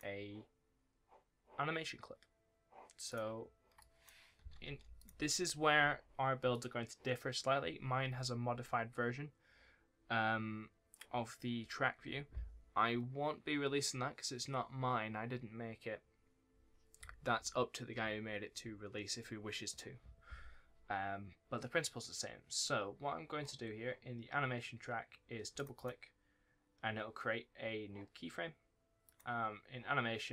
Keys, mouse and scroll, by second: 3.0 double click, 3.0 click, 3.3-3.7 scroll up 1, 3.7 click, 4.2-4.6 scroll up 1, 4.6 Delete, 4.9 click, 9.3-11.5 scroll up 1, 25.5 click, 25.7 double click, 26.5-26.8 scroll up 1, 28.9-30.3 scroll up 1.